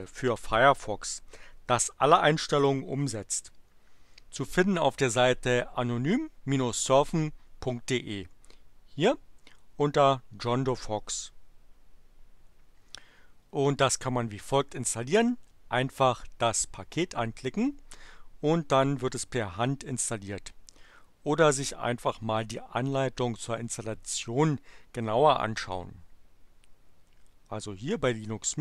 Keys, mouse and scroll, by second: 10.4 click.